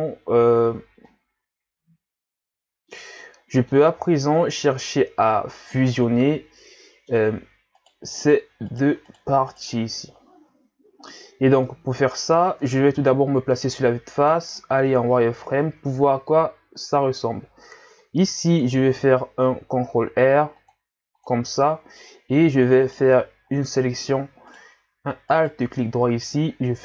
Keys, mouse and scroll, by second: 1.1-4.0 middle drag, 4.0-4.6 scroll down 1, 4.6-7.6 middle drag, 7.9 right click, 8.2 right click, 8.7 right click, 9.1 right click, 9.5 right click, 10.1 scroll down 1, 10.6 scroll up 2, 11.6-13.0 middle drag, 13.0 KP_1, 14.0-14.3 scroll up 1, 14.3 z, 15.0 scroll up 1, 15.5-16.0 scroll down 3, 16.2-17.3 scroll up 2, 18.7 ctrl+r, 21.6-22.7 scroll up 1, 22.8 right click, 23.1 c, 25.3 alt+right click.